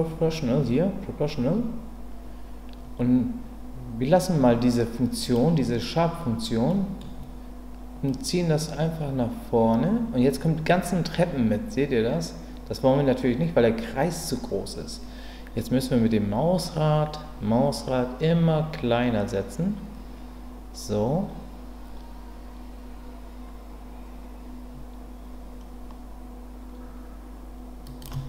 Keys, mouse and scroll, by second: 5.4-6.4 drag, 6.7 middle click, 8.1-28.1 drag.